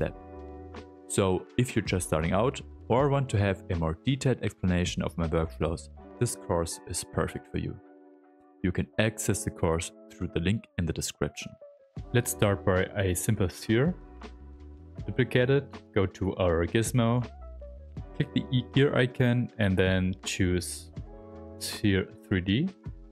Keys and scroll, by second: 0.7 s, 1.1 s, 2.4 ctrl+z, 2.6 space, 6.2 space, 8.3 space, 11.4 w, 12.0 q, 14.7 ctrl+shift+d, 15.7 w.